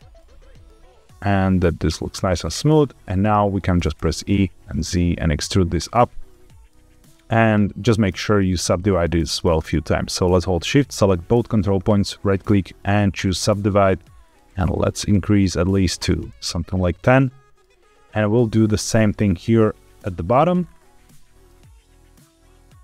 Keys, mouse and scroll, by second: 0.1 middle click, 0.8 g, 1.8 click, 2.7 scroll down 1, 3.0 middle click, 3.9 e, 4.1 z, 5.7 click, 6.2 middle click, 6.7 scroll down 1, 8.2 click, 8.6 g, 8.7 z, 9.3 click, 10.6 shift+click, 11.7-13.2 right drag, 14.1 click, 14.4 click, 14.6 click, 14.7 click, 14.9 click, 15.1 click, 15.2 click, 15.4 click, 15.5 click, 16.6 scroll down 2, 16.9 shift+middle click, 18.5 click, 19.2 middle click, 20.0 shift+middle click, 20.5-21.0 scroll up 4, 21.0 middle click, 21.7 click, 21.8 middle click, 22.3-22.8 typing.